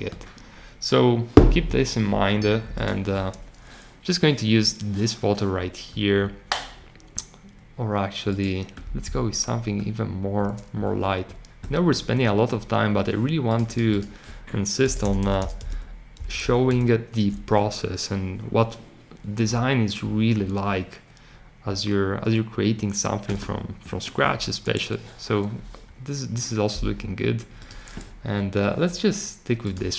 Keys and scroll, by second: 15.1 n, 15.6 a.